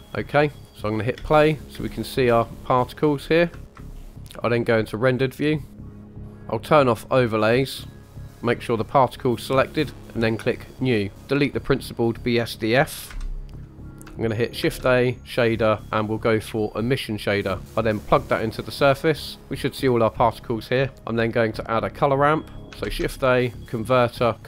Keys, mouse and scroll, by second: 0.0 click, 0.0 shift+middle click, 1.1 space, 1.6 space, 1.8 space, 2.3 space, 2.9-3.5 scroll up 4, 3.5 shift+middle click, 3.7 KP_1, 3.9 scroll up 2, 4.2-5.5 scroll down 5, 5.7 click, 7.0 click, 7.9 click, 8.6 click, 10.4 click, 11.2-11.9 scroll up 2, 13.1 Delete, 13.7 middle click, 14.7 shift+a, 18.0-18.7 drag, 20.9 middle click, 22.9 shift+a.